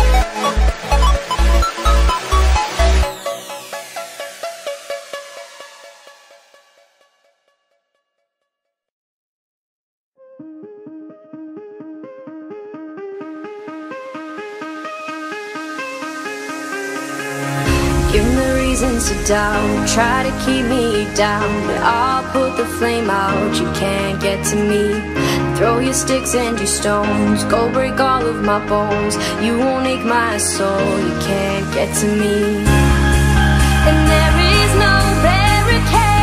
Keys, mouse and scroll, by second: 3.6-3.9 scroll up 3, 3.9 shift+scroll down 1, 3.9 shift+middle click, 4.5-5.0 scroll up 2, 5.0 Tab, 5.8-7.9 middle drag, 7.9 b, 10.0-13.0 drag, 13.0 ctrl+z, 13.7 z, 15.6 middle click, 16.2 b, 17.7-19.1 middle drag, 19.1 KP_7, 19.9 b, 21.2 b, 23.3 c, 29.2-30.6 middle drag, 30.6-33.0 drag, 33.0 Tab, 33.5 a, 34.4 a, 35.7 Tab.